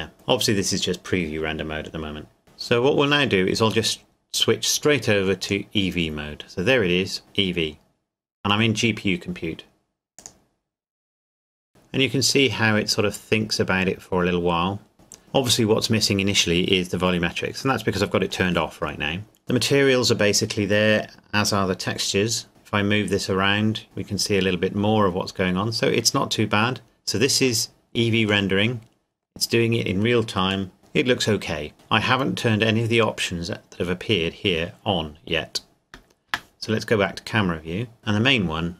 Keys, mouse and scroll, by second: 5.4 click, 10.2 click, 22.5 middle click, 25.2 scroll up 1, 26.4 scroll down 1, 27.7 middle click, 36.2 KP_0.